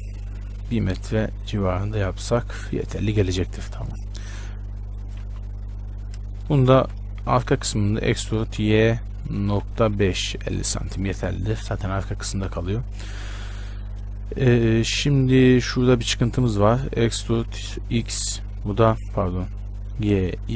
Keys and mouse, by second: 6.1-8.1 right drag, 7.0 z, 8.3 e, 11.3 z, 17.3 e, 20.3 g.